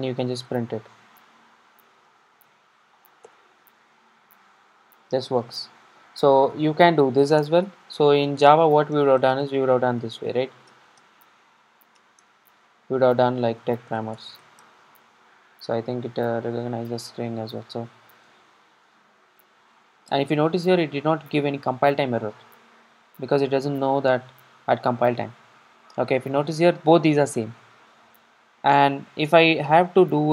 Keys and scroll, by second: 0.5 Tab, 3.3 Tab, 3.3 Return, 5.5 super+r, 16.3 super+r, 18.3 super+d.